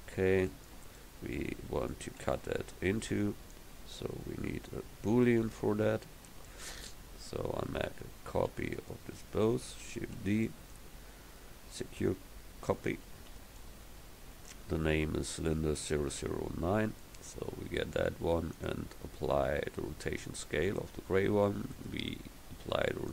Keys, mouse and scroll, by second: 2.6 KP_1, 10.2 shift+d, 12.6 click, 14.4-18.5 drag, 21.8-22.9 drag.